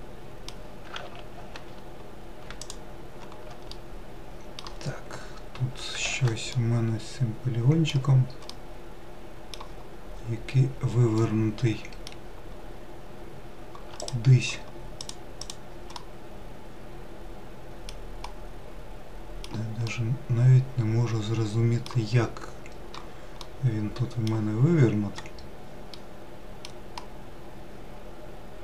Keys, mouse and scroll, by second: 1.1 ctrl+z, 1.4 ctrl+z, 2.6 shift+click, 3.7-4.8 middle drag, 4.8-6.0 scroll down 3, 6.2 ctrl+z, 6.5-10.2 middle drag, 10.2-10.9 scroll up 2, 11.2-14.0 middle drag, 14.0 click, 15.0 click, 15.5 click, 16.0-22.4 middle drag, 22.4-23.4 scroll down 1, 23.4-25.2 middle drag, 25.2-26.0 scroll up 1, 26.0-28.6 middle drag.